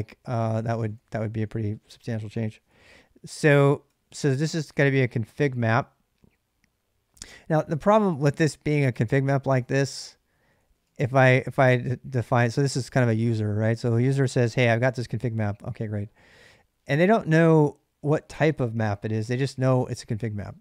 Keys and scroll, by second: 0.0-3.8 typing, 4.9-5.2 l, 6.9-11.4 typing, 12.7 typing, 14.0-14.5 typing, 15.6-16.8 typing, 19.4 h, 19.7 h.